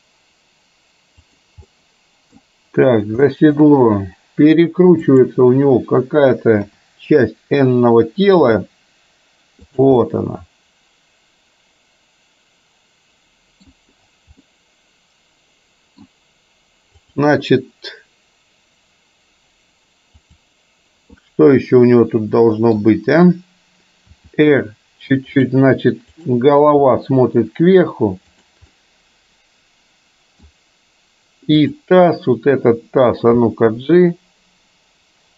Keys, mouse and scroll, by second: 1.7-2.4 middle drag, 3.3 scroll up 1, 3.4 middle drag, 5.2 click, 6.7 KP_7, 8.6 r, 10.1-13.7 middle drag, 14.6-16.1 middle drag, 17.1 click, 20.3 click, 21.3-22.8 middle drag, 24.2 r, 26.2 click, 26.8 r, 28.8-30.6 middle drag, 31.8 click, 33.4 g.